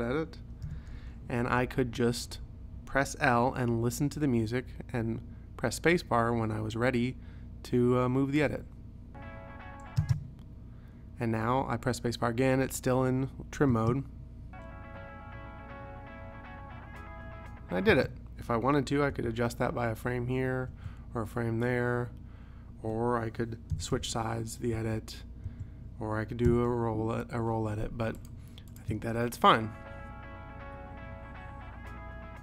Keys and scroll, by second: 0.7 p, 8.5 |, 10.1 space, 13.8 space, 18.0 space, 19.2 ,, 20.8 ., 23.8 ], 24.8 ,, 25.5 ., 26.5 [, 29.0 space.